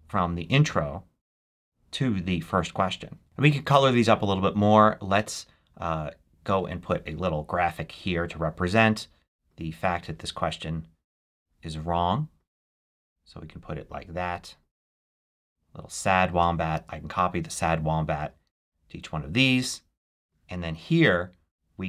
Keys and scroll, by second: 16.6 super+c, 17.3 super+v.